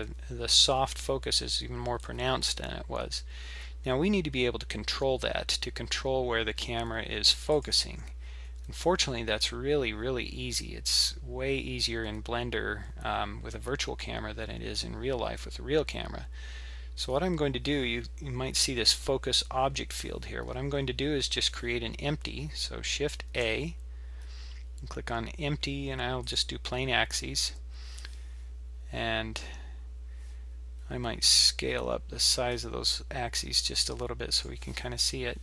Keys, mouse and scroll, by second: 2.0 shift+`, 23.3 shift+a, 31.2 click.